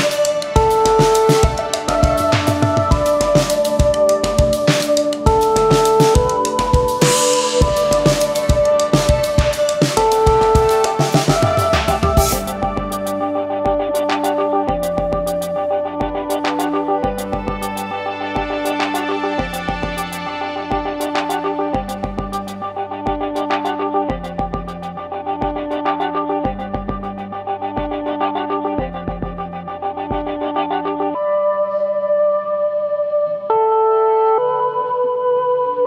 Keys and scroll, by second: 11.1 ctrl+8.